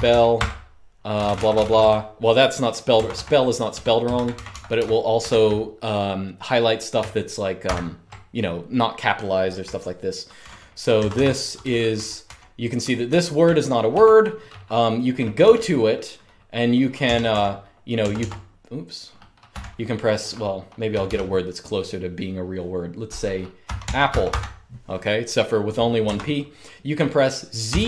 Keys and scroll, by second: 0.0-4.9 typing, 2.8 Escape, 7.1-7.9 typing, 10.1-14.1 typing, 15.1 typing, 16.5-20.6 typing, 22.3-24.5 typing, 25.8 Escape, 27.1-27.8 typing.